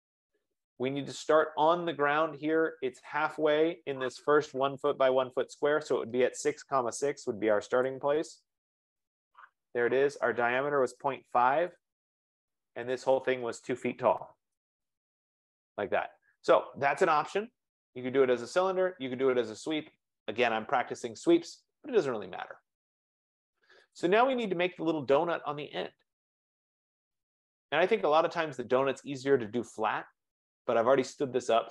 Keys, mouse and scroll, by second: 6.6-7.5 typing, 10.0-11.8 typing, 13.8-14.8 typing, 16.0 Return, 16.0 click, 24.1 click, 27.8 scroll, 28.7-30.0 scroll, 30.4-31.0 scroll, 31.0 scroll.